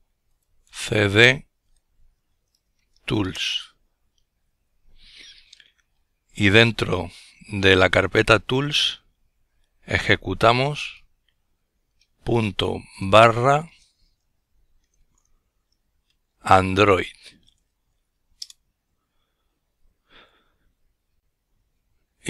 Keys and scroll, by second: 7.8-9.5 typing, 10.7-14.3 typing, 15.8 typing.